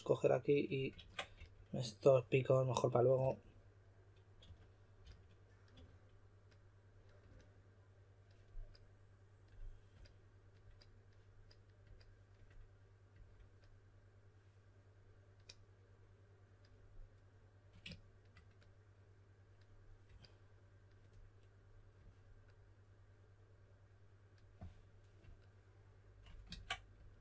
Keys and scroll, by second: 0.9 super+z, 1.3 s, 3.1 typing, 4.2-5.7 typing, 26.4 super+z.